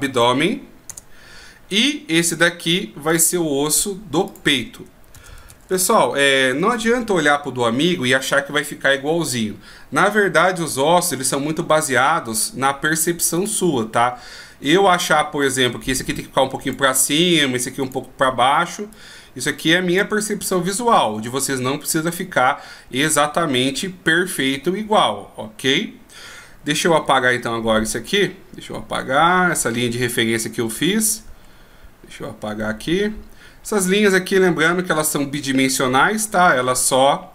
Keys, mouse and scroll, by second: 3.3 right click, 4.5 click, 13.6 right click, 15.6 click, 18.0 right click, 19.1 click, 27.3-28.4 d, 28.4 right click.